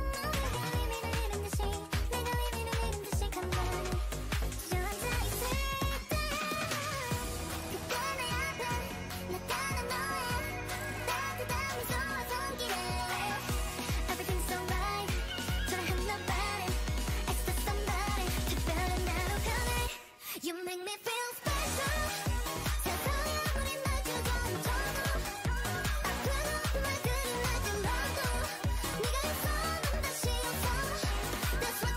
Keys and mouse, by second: 0.5 g, 3.8-5.1 drag, 3.8-4.9 right drag, 5.5 a, 5.9 a, 7.1 Tab, 8.5 right click, 8.9 Tab, 9.5 z, 10.6 Tab, 13.4 click, 13.9 Tab, 15.2 Tab, 18.1 click, 18.1-20.2 right drag, 19.2-20.4 drag, 20.2 shift+d, 21.7 Tab, 23.3 right click, 26.0 c, 27.6-29.6 drag, 28.1 x, 29.4-31.4 right drag, 30.8 g.